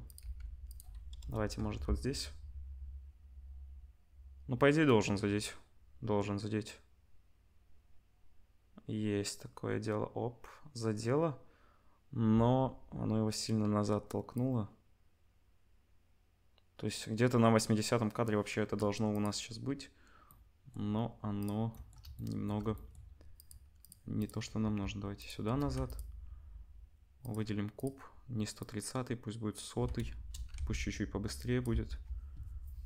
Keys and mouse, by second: 0.0-1.8 typing, 1.5 Tab, 12.3 space, 14.4-19.2 drag, 19.2-21.4 middle drag, 21.4 click, 21.4-23.3 middle drag, 23.3 click, 23.8 click, 24.2 click, 24.6 g, 25.6 ctrl+s, 25.8 click, 27.2 click, 27.3 middle click, 27.7 click, 27.8-28.6 middle drag, 28.6-32.8 drag, 30.1 KP_0, 30.6 ctrl+s, 32.4 space.